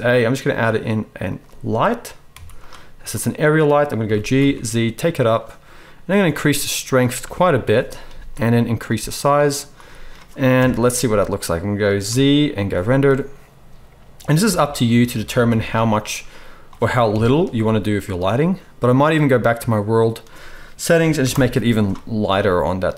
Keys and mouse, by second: 2.2 z, 4.0 g, 6.5 click, 10.5 KP_0, 12.0 z, 14.4 g, 14.8 click, 14.8-19.3 right drag, 15.4 r, 17.0 KP_1, 17.6 z, 19.2 click, 19.2 middle click, 22.3 z.